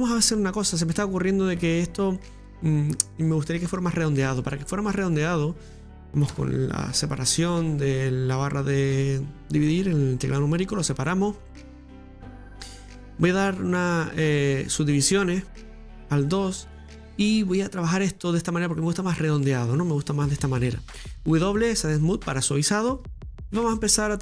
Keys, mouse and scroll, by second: 4.1 right click, 4.6-6.3 middle drag, 6.3 KP_Divide, 7.7-9.2 middle drag, 9.2-9.7 scroll down 1, 9.7-14.3 middle drag, 14.3-16.8 drag, 16.8-19.7 middle drag, 19.7-20.4 scroll up 4, 20.4-21.1 scroll down 2, 21.8 w, 23.5 Tab, 23.5 scroll up 1, 23.6-24.2 middle drag.